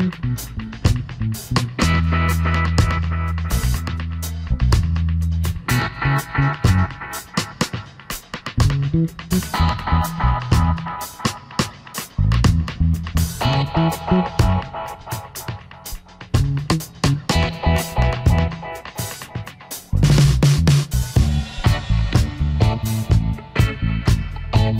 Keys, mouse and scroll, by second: 0.2 space.